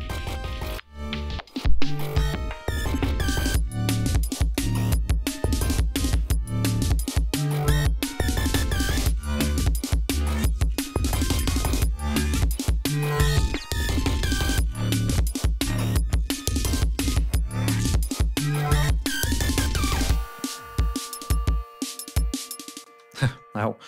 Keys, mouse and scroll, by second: 0.0 click, 1.0 click, 2.2-4.7 drag, 5.4 click, 8.2 click, 14.7 click, 16.5 click, 22.9 space.